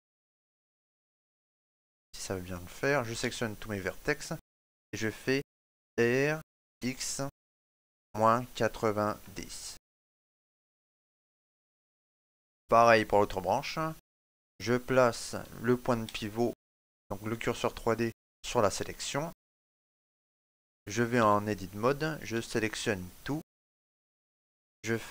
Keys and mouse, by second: 3.0 a, 5.7 r, 11.1 shift+middle click, 11.8 Tab, 12.8 right click, 15.8 shift+s, 19.3 right click, 21.0 Tab, 22.1 a.